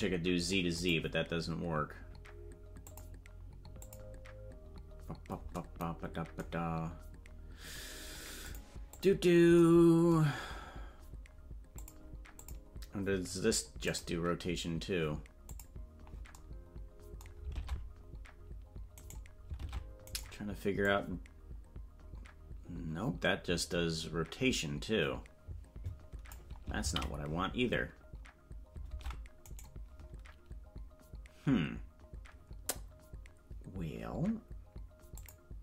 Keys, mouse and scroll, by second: 0.7 click, 2.8 click, 3.7 click, 8.4 click, 8.9 click, 11.7 click, 12.3 click, 13.8 click, 15.4 click, 17.5 ctrl+Tab, 19.0 right click, 19.6 ctrl+Tab, 20.1 right click, 20.8-26.3 drag, 27.8 ctrl+z, 29.5 right click, 35.1 click.